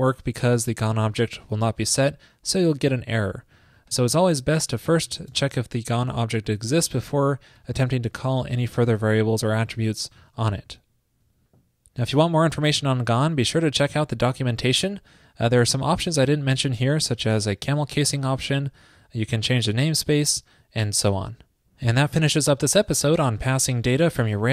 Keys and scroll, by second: 6.8 super+s, 7.7 alt+Left, 7.9 alt+Left, 8.3 alt+Left, 10.9 super+s.